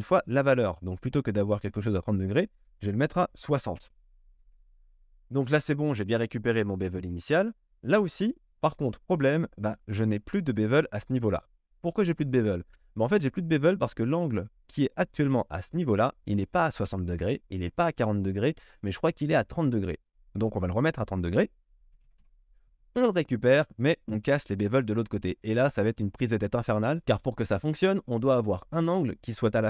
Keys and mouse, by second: 2.2-8.8 drag, 8.8 shift+middle click, 9.2 drag, 9.4-9.7 shift+middle drag, 9.7-13.7 drag, 13.7 shift+middle drag, 13.9 shift+click, 14.0-15.1 shift+middle drag, 15.1-24.2 drag, 24.2-29.6 middle drag.